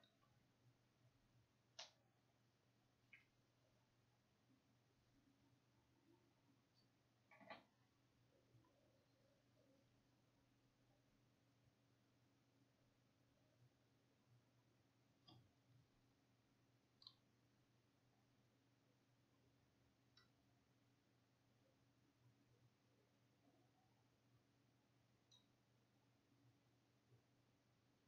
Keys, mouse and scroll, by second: 17.2 click.